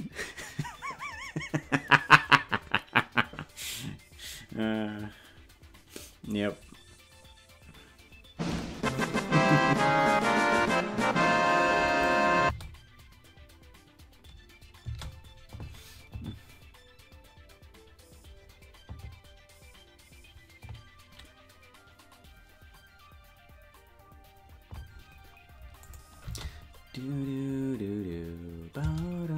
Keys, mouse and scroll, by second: 11.8 click, 12.4 space, 14.8 space, 25.8 click, 26.2 space.